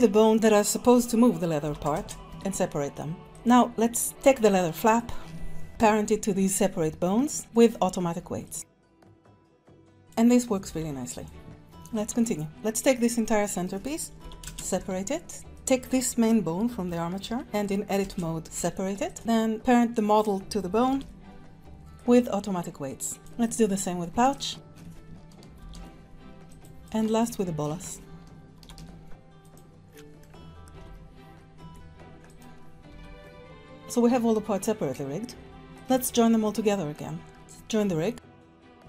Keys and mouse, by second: 1.6 p, 2.3 Tab, 3.3 click, 4.8 shift+click, 5.7 ctrl+p, 8.5 click, 8.6 ctrl+Tab, 8.9 click, 9.3-10.8 typing, 9.6 click, 11.1 click, 11.9 shift+click, 12.5-13.6 drag, 14.2 p, 14.8 Tab, 15.4 Tab, 15.6 click, 16.9 Tab, 17.2 Tab, 18.0 Return, 18.4 Escape, 18.4 p, 18.5 Tab, 19.1 click, 20.9 ctrl+p, 23.2 click, 24.2 shift+click, 25.6 ctrl+p, 27.0 shift+click, 28.5 ctrl+p, 30.2 ctrl+Tab, 30.2-30.7 drag, 30.7 r, 32.3 click, 32.9 r, 35.7 click, 36.4 middle click, 38.2 shift+click, 38.6 ctrl+j.